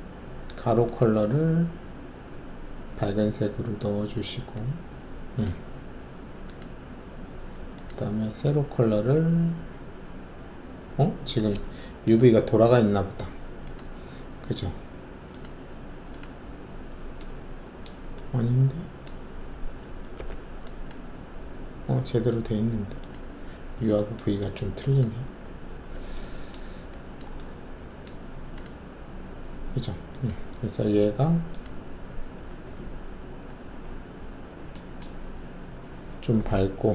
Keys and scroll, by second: 20.1 alt+4.